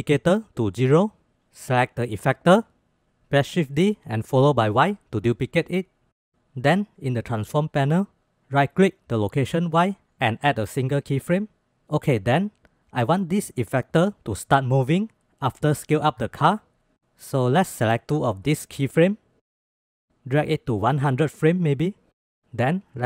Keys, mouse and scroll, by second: 0.8 click, 1.5 click, 2.8 shift+d, 4.5 shift+drag, 5.4-6.1 drag, 8.7-10.6 drag, 14.0-17.0 drag, 17.9-19.1 drag, 19.8-22.4 drag.